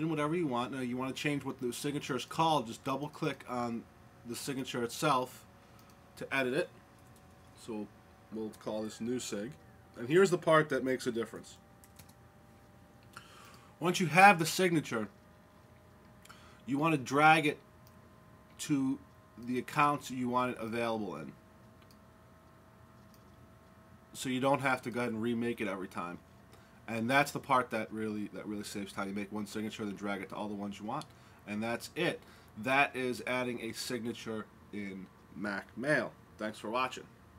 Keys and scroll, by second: 8.4 e, 8.8 Left, 9.3 Left, 9.4 Left, 9.4 Left, 9.5 Left, 9.6 Left, 9.7 Left, 9.8 Left, 10.6-13.1 Left, 11.2-11.8 typing, 13.1 typing.